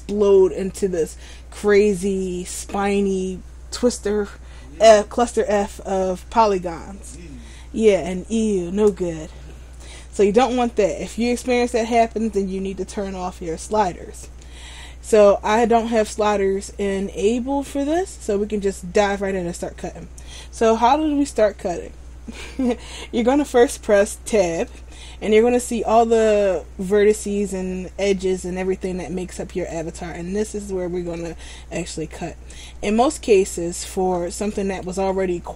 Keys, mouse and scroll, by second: 16.1 middle click, 24.6 Tab, 26.6 scroll up 1, 27.9 scroll up 1, 28.3 shift+middle click, 31.7 shift+middle click, 33.6-34.3 scroll down 1, 34.3 middle click.